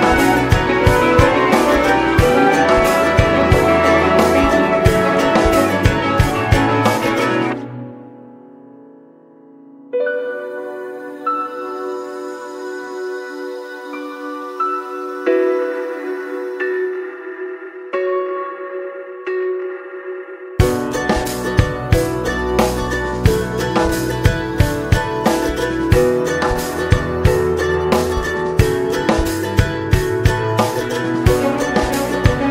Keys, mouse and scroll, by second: 0.8-3.6 drag, 3.6 middle click, 4.3 ctrl+s, 5.1-6.8 scroll up 2, 6.8-7.5 scroll down 2, 9.5-11.9 drag, 11.9-13.8 shift+middle drag, 13.8-16.6 drag, 20.8 middle click, 21.7 space, 24.8-26.0 drag, 26.0-27.2 middle drag, 27.2 click, 27.8-28.8 scroll up 2, 28.8-30.7 drag, 30.7-32.5 shift+middle drag.